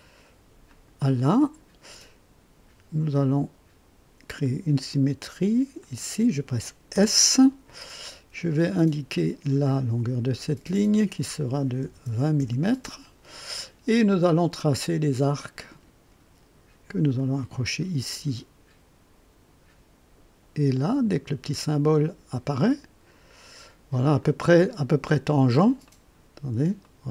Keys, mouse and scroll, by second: 0.6 click, 1.4 right click, 3.2 click, 4.4 click, 5.8 click, 6.9 s, 9.1 click, 10.9 click, 11.8 KP_2, 12.0 KP_0, 12.4 KP_Enter, 15.4 click, 17.0 click, 20.8 click, 24.2 click, 25.8 right click, 26.8 right click.